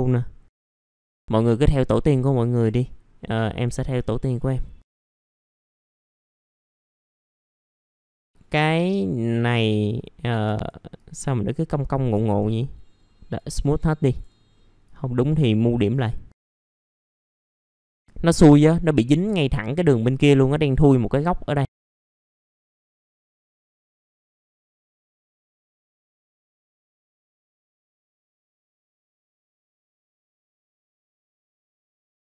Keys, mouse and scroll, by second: 0.9 middle click, 0.9 scroll down 1, 1.1-1.8 scroll up 1, 1.9 middle click, 2.6 click, 3.7 scroll down 1, 4.8 middle click, 5.0 scroll down 1, 5.2 scroll up 1, 5.8 click, 5.9 middle click, 6.0 scroll down 1, 6.7 shift+click, 7.0 shift+click, 7.2 right click, 7.4 middle click, 8.2-9.3 scroll up 1, 9.3 click, 11.6 ctrl+click, 12.2 right click, 13.3 click, 13.7-14.1 scroll up 1, 14.1-16.5 drag, 17.6 middle click, 17.6-19.6 scroll down 2, 17.9 middle click, 19.6-21.6 scroll up 1, 21.6 click, 21.7 middle click, 21.8 click, 22.2 right click, 22.6 click, 22.7 middle click, 23.1 click, 23.2 right click, 23.5 click, 23.6 scroll up 1, 23.8 click, 24.4 scroll down 1, 24.5 middle click, 24.6 scroll up 1, 24.7 middle click, 24.9 click, 25.1 middle click, 25.2 ctrl+click, 25.6 ctrl+click, 25.8 ctrl+click, 26.4 ctrl+click, 26.6 right click, 26.9 click, 27.1 middle click, 27.3 scroll up 1, 27.4 click, 28.5 right click, 28.8 click, 29.8 middle click, 30.0 click, 30.3 middle click, 30.7-32.3 drag.